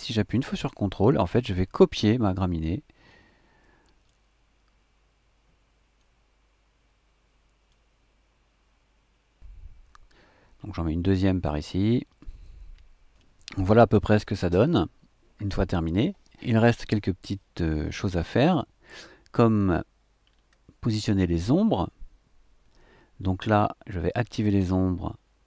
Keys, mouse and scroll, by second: 3.1 click, 3.2 middle click, 3.7 click, 3.9 middle click, 4.2 click, 6.0-7.9 drag, 8.7 middle click, 12.1 click, 19.4-19.9 scroll down 1, 20.2-20.6 scroll down 2.